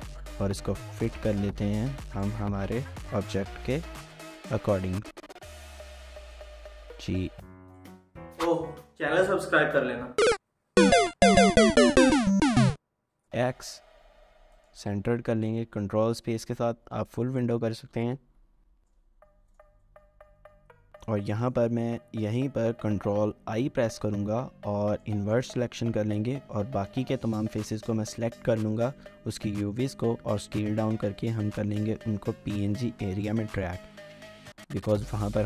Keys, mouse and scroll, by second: 1.8-4.2 typing, 1.8 scroll up 1, 2.2 shift+middle click, 6.6-6.9 typing, 13.0-13.7 typing, 15.2 ctrl+space, 16.3 scroll up 1, 17.0 shift+middle click, 17.7-19.3 typing, 19.9 ctrl+space, 21.1 scroll down 1, 21.4 shift+middle click, 23.5 ctrl+i, 26.8-27.8 scroll down 1, 27.8 a, 30.0 typing, 31.6 typing, 34.1 Tab, 34.5-35.2 typing, 34.6 scroll up 1, 34.9 shift+middle click.